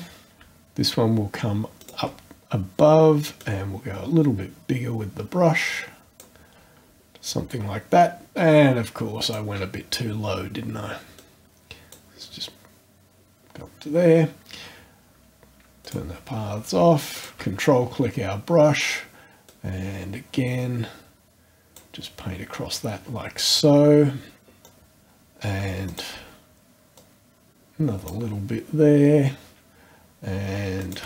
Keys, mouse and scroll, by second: 1.8 shift+click, 2.4-3.0 shift+scroll up 1, 3.4-6.4 drag, 9.2 click, 11.2 click, 15.8 click, 17.1 ctrl+click, 19.5-22.0 drag, 24.6 click, 25.9 shift+click, 27.0-28.3 drag, 30.8 shift+click.